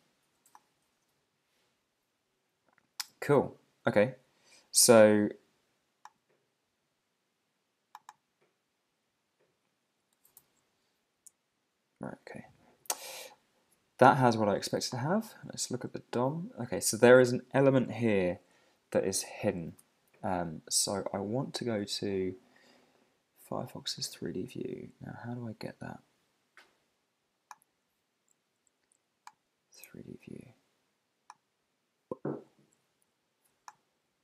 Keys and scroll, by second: 10.3 super+0, 15.6 super+`, 19.7 super+`, 21.8 super+`.